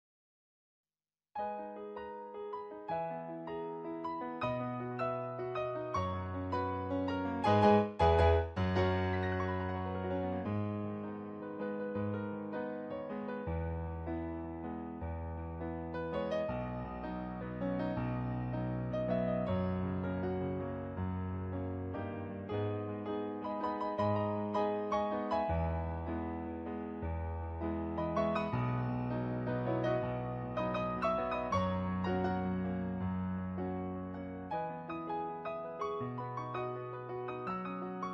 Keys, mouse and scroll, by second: 0.0 ctrl+z, 1.7 ctrl+z, 2.2 ctrl+z, 5.8 ctrl+z, 6.7 ctrl+z, 7.4 ctrl+z, 9.4 ctrl+z, 10.7 ctrl+z, 11.0 ctrl+z, 11.8 ctrl+z, 12.3 ctrl+z, 18.4 ctrl+z, 20.6 ctrl+z, 22.5 ctrl+z, 24.8 ctrl+z, 28.3 ctrl+z, 28.8 ctrl+z, 29.4 ctrl+z, 29.9 ctrl+z, 35.1 ctrl+z, 36.2 ctrl+z, 36.6 ctrl+z, 37.2 ctrl+z, 37.6 ctrl+z.